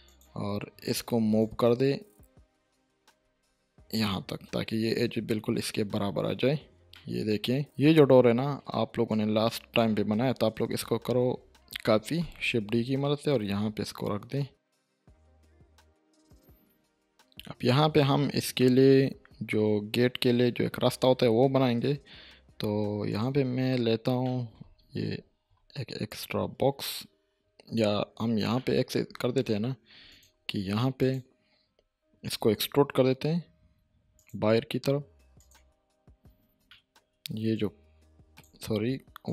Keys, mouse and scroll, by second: 0.0-4.2 drag, 5.4-5.9 scroll up 1, 5.9-6.5 scroll down 1, 6.8 click, 6.9-7.6 middle click, 7.6 click, 7.8 middle click, 9.1-10.0 click, 10.2 ctrl+z, 12.0 shift+d, 14.5-15.1 click, 15.3 shift+middle click, 15.4 scroll up 1, 15.5 shift+middle click, 19.1 middle click, 20.7-21.3 scroll up 1, 21.7 shift+a, 23.1 click, 23.6-24.2 scroll down 1, 24.2 middle click, 25.1 7, 26.1-27.0 drag, 28.5-29.1 middle click, 29.4 scroll up 1, 30.1 click, 30.3 Tab, 31.0 click, 31.7-32.7 scroll up 1, 32.7-34.2 scroll up 1, 34.2 click, 36.3 scroll down 1, 36.7 shift+middle click, 37.5-38.4 click, 38.6 ctrl+z, 39.2-39.3 drag.